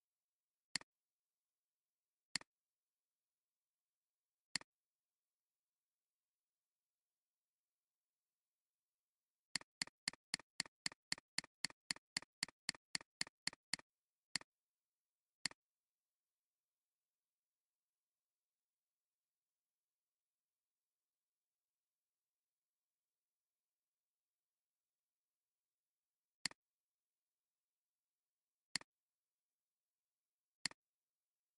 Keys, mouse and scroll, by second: 4.5 click, 9.6 double click, 10.7 double click, 11.3 double click, 11.9 double click, 16.1 click, 16.7 click, 26.0 alt+scroll down 1, 26.3 space, 26.8 space, 28.6 space, 28.7 space.